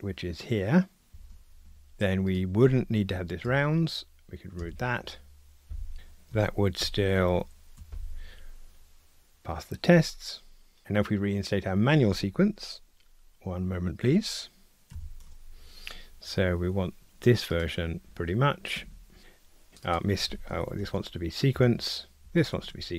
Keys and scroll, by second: 1.2 super+v, 3.4 alt+Return, 6.8 ctrl+alt+r, 22.2 Return, 22.3 alt+shift+Left.